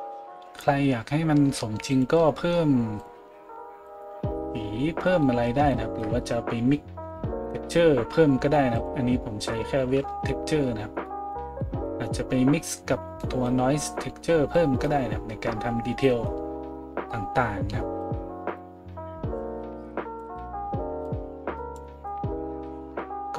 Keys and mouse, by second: 3.0-18.8 middle drag, 8.7 click, 18.0-23.3 drag.